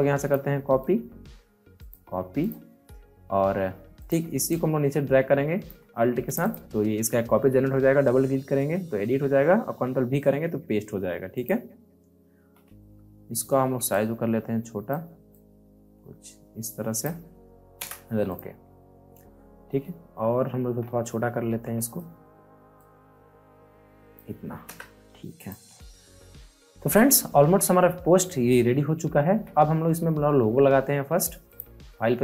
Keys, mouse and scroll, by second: 0.6 right click, 0.7 right click, 1.7 click, 3.9 ctrl+click, 4.5-6.2 alt+drag, 9.3 ctrl+Num_Lock, 9.3 click, 9.6 ctrl+v, 11.3 click, 12.3 t, 13.8-17.7 drag, 17.7 Return, 18.2 click, 18.6 space, 18.9 scroll up 1, 19.2 space, 19.4 scroll down 1, 20.3 alt+scroll up 1, 20.7 scroll down 1, 21.4 ctrl+t, 22.7-24.6 drag, 24.6 Return, 25.3 click, 25.3 click, 25.7 alt+scroll down 1, 27.2 alt+scroll up 1, 31.4-32.2 drag.